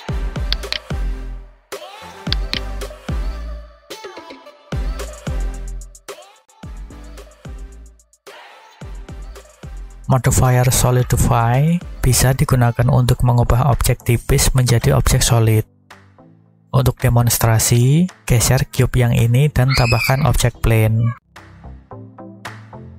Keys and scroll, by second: 21.4 g, 22.7 y.